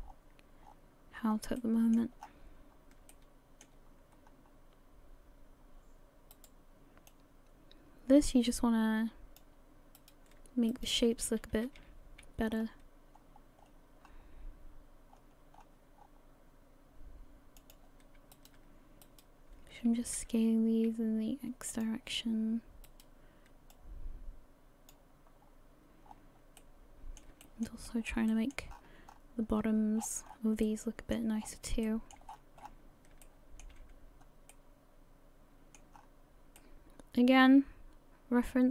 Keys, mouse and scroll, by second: 0.0-0.9 scroll down 13, 0.9-1.4 scroll up 3, 1.6 shift+middle click, 2.2-3.1 scroll up 6, 3.1 shift+middle click, 4.1-4.6 scroll up 3, 6.3 right click, 7.1 click, 10.0 right click, 10.7 shift+right click, 11.5 s, 18.3 right click, 19.0 shift+right click, 20.2 s, 22.9 right click, 23.7 click, 25.3-26.6 scroll down 9, 26.6 middle click, 27.4 shift+middle click, 27.8 shift+scroll down 1, 28.0 shift+middle click, 28.3 shift+middle click, 28.7-29.5 scroll up 9, 29.5-30.5 scroll down 17, 30.6 middle click, 31.5 scroll down 1, 31.8 shift+middle click, 32.4-33.2 scroll up 13, 33.2 shift+middle click, 33.8-34.5 scroll up 1, 34.5 middle click, 35.9 scroll up 6, 36.6 middle click.